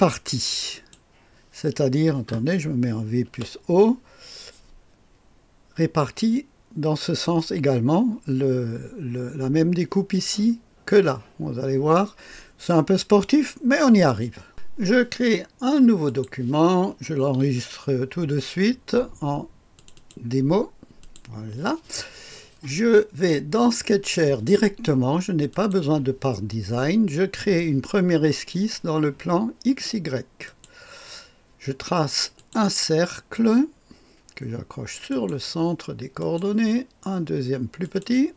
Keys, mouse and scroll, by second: 0.7 click, 1.3 click, 3.0-3.9 typing, 14.5 click, 16.1 right click, 16.3 click, 17.4 ctrl+s, 19.7 click, 21.0 click, 25.5 click, 30.4 click, 32.4 click, 35.1 click, 36.2 click, 37.8 click.